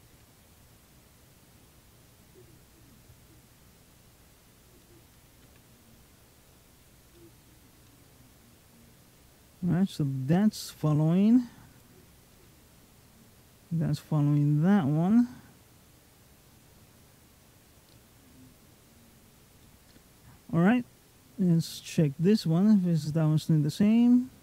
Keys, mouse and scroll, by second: 5.2 r, 7.0 middle click, 7.6 g, 10.5 middle click, 11.5 click, 12.2 g, 19.4 middle click, 21.4 click, 22.0 g.